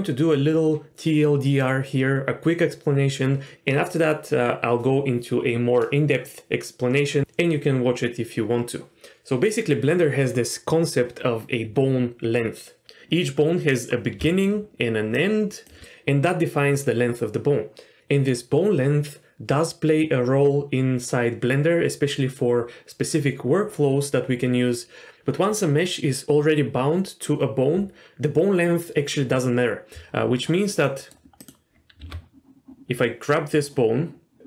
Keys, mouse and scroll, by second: 14.2 d, 14.3 click, 14.7-15.1 d, 15.1 click, 15.7 d, 15.7 d, 30.9 middle click, 31.4 click, 32.0 r.